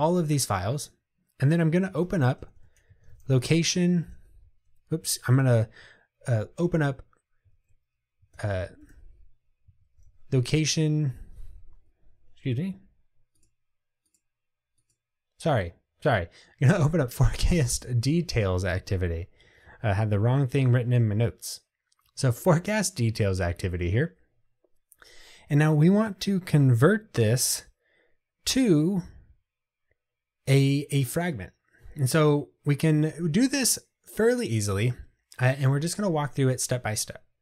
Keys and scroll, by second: 2.1 super+o, 7.6 super+o.